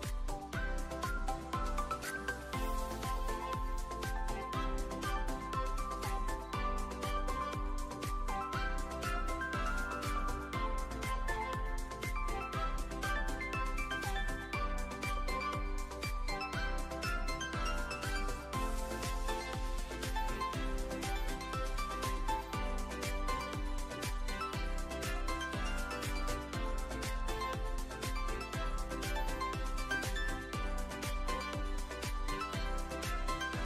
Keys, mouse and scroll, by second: 0.5-1.6 drag, 3.0 q, 4.0 `, 4.7-5.2 alt+middle drag, 7.3 shift+a, 10.3 click, 11.2 `, 12.1 middle drag, 12.6 click, 13.4 click, 14.5 click, 15.6 `, 16.5 middle click, 17.1 click, 18.3 click, 20.8-22.0 drag, 22.7-26.2 drag, 27.1-28.3 drag, 31.3 shift+d, 31.8 x, 32.7 click, 32.9 shift+middle click.